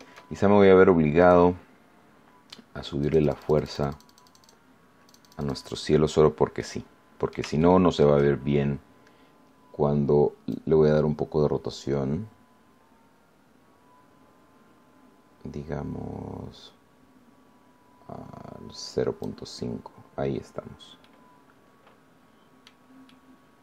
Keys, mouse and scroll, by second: 1.2 click, 3.0-4.6 drag, 5.0 click, 6.5 middle click, 7.6 shift+middle click, 10.4-19.4 drag, 20.6-20.9 scroll down 2, 21.0-22.8 middle drag, 23.0 middle click.